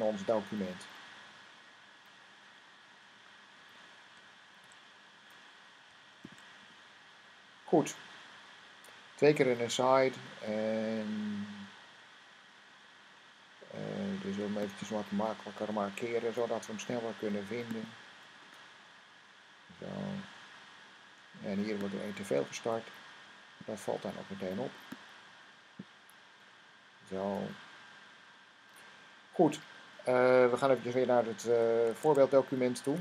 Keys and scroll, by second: 0.8 Down, 1.1 Down, 1.4 Down, 1.6 Down, 1.8 Down, 2.0 Down, 2.2 Down, 4.5 shift+., 6.1-6.5 typing, 31.9 Tab.